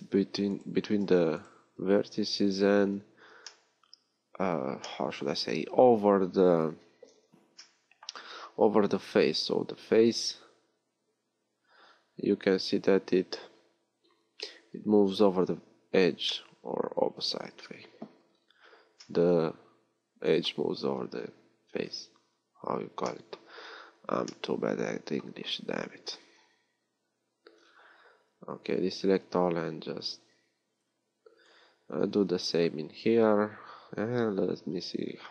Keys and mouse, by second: 1.0 j, 17.8 KP_1, 22.1-23.4 middle drag, 32.2 b, 34.4 f.